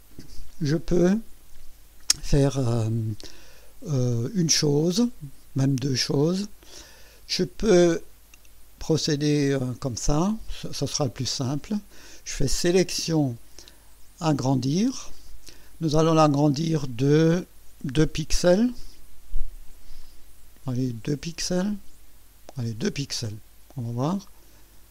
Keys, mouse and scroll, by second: 12.6 click, 14.6 click, 22.9 KP_2.